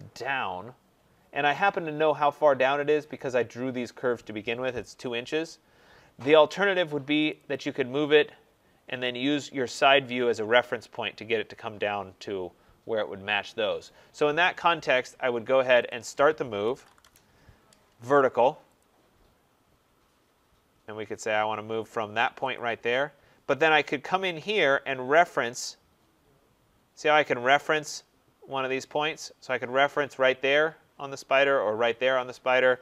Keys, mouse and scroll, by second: 0.9-1.9 scroll, 1.9 scroll, 7.2 click, 7.4 click, 8.3-9.7 scroll, 9.9 scroll, 10.0 middle click, 10.1 middle click, 10.2 middle click, 15.8 click, 16.3-17.3 typing, 18.7 click, 20.2 middle click, 20.2 middle click, 20.3 middle click, 20.4-21.1 middle click, 21.0 middle click, 21.0 middle click, 22.0 scroll up 9, 22.4 click, 22.7 scroll down 5.